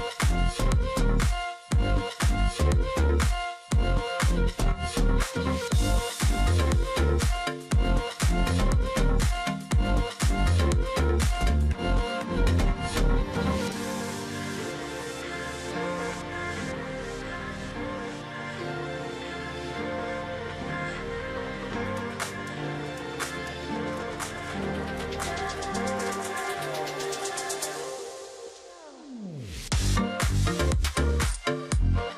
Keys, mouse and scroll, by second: 1.7 space, 5.2 shift+click, 6.3 double click, 6.6 alt+click, 7.8 ctrl+click, 8.0-8.4 alt+scroll down 1, 8.4 alt+scroll up 1, 8.9 space, 10.1 alt+scroll up 1, 11.7 shift+click, 12.4 alt+click, 12.7-13.2 alt+scroll down 1, 13.2 ctrl+click, 13.4-13.7 alt+scroll up 1, 13.9-14.2 alt+scroll down 1, 14.2 alt+scroll up 1, 15.3-15.6 alt+scroll down 1, 15.7-16.3 alt+scroll up 1, 16.3 ctrl+click, 17.0 alt+scroll down 1, 17.2 alt+scroll up 1, 17.8 space, 19.2 alt+scroll down 1, 19.4 alt+scroll up 1, 19.7 space, 21.6 double click, 23.0-23.5 alt+scroll up 1, 25.5 shift+click, 26.9-27.4 alt+scroll up 1, 28.7 alt+scroll down 1, 28.9-29.4 alt+scroll up 1.